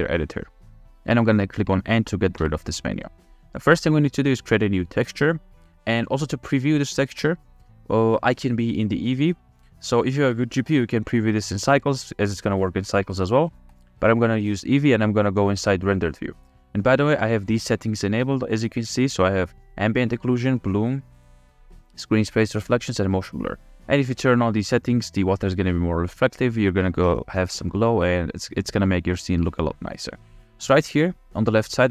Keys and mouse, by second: 2.4 n, 14.0 click, 18.7 click, 20.3 click, 21.4 click, 22.6 click, 23.3 click.